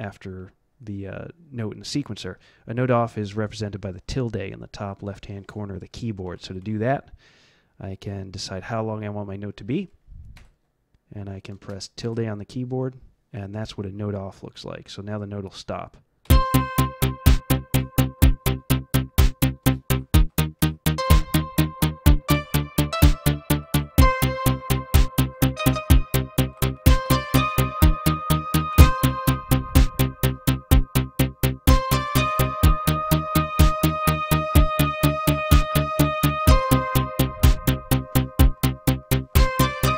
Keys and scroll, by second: 6.2 Down, 6.4 Down, 11.5 space, 12.0 space, 16.2 F11, 19.6 space, 19.9 Up, 20.2 Up, 20.9 shift+z, 22.2 x, 22.8 c, 23.9-26.0 typing, 26.4 Up, 26.7 Up, 26.9 Delete, 28.7 F11, 34.0 Up, 34.0 `, 34.4 space, 34.5 Up, 35.0 Up, 35.9 Up.